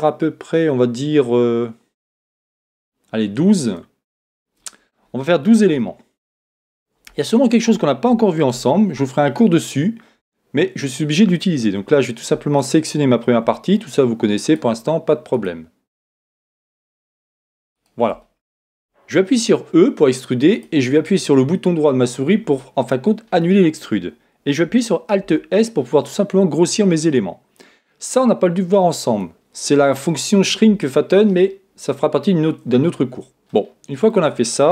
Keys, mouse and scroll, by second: 4.3 click, 5.8-9.1 middle drag, 8.5 ctrl+Tab, 16.8-20.5 right drag, 19.3 e, 22.6-25.3 middle drag, 25.2 alt+s, 29.2 click, 32.7-34.7 middle drag.